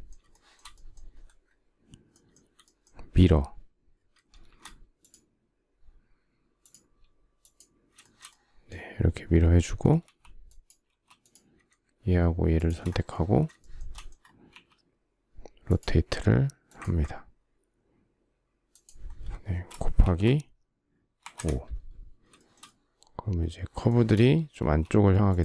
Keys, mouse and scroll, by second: 4.1 shift+x, 7.6 shift+middle click, 9.6 e, 10.5 space, 12.2 shift+click, 13.2 shift+middle click, 14.1 q, 19.6 shift+8, 20.8 5, 20.9 Return, 22.0 shift+middle click, 23.5 shift+middle click, 24.2 space.